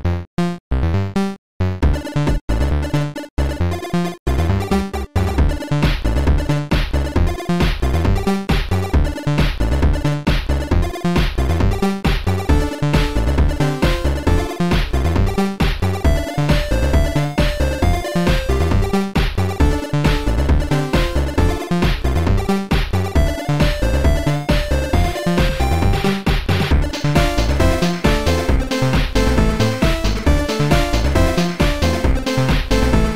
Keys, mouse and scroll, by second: 0.3 click, 1.8 click, 3.5 click, 4.3 click, 4.9 click, 5.9 click, 9.5 click, 10.9 click, 12.5 shift+click, 14.9 shift+click, 15.7 shift+click, 16.2 shift+click, 18.6 shift+click, 20.2 click, 24.1 click, 25.5 click, 27.3 right click, 29.9 click, 31.8 click, 31.8 right click, 32.6 click.